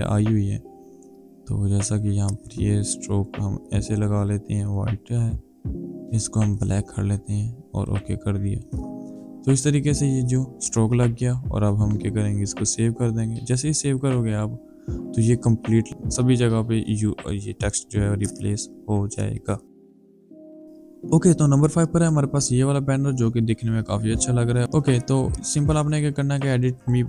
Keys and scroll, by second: 12.4 ctrl+s.